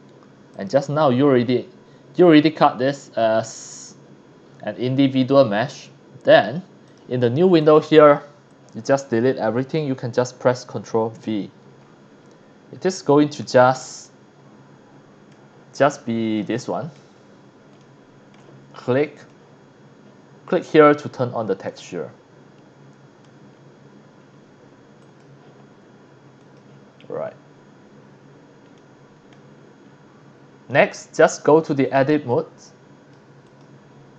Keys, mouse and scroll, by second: 0.5 click, 0.7-2.2 scroll up 1, 4.5-4.8 scroll up 4, 6.3 click, 6.8 click, 7.6 click, 8.5 click, 9.5 Delete, 11.1 ctrl+v, 11.8-12.3 scroll up 4, 12.7-13.1 scroll down 1, 13.5-13.8 shift+middle drag, 14.0-15.4 middle drag, 15.5 scroll up 1, 15.9 scroll down 1, 16.4 shift+middle drag, 17.2 scroll up 2, 17.8-18.3 shift+middle drag, 19.2 click, 21.7 middle click, 21.7-23.2 drag, 23.5 scroll up 2, 24.3 scroll up 1, 25.0 click, 26.4 click, 26.8 scroll down 1, 27.2-27.7 scroll up 2, 27.8 scroll down 2, 28.3 scroll up 1, 28.7-29.3 middle drag, 29.8-30.2 scroll up 4, 30.4 middle drag, 30.7 middle click, 31.8 click, 32.3-33.1 drag, 33.4 click.